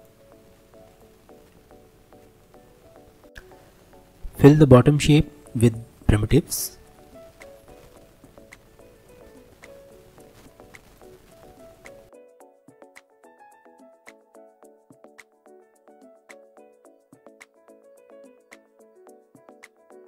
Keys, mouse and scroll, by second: 0.6 Tab, 0.9 click, 1.2-1.6 scroll down 1, 1.6 alt+z, 1.9-3.3 middle drag, 3.3 click, 5.2-6.5 middle drag, 6.9 alt+middle click, 7.4-8.0 scroll up 1, 8.0 shift+a, 12.2 click, 13.2 g, 14.1 right click, 14.5 click, 14.7 scroll down 3, 15.0 click, 15.3 scroll up 1, 15.4 shift+middle click, 15.7 alt+z, 15.9 click, 16.1-18.7 typing, 16.9 Tab, 17.3 click, 18.2 scroll up 1, 18.3 shift+middle click, 18.9 click, 19.8 x, 20.0 scroll up 2.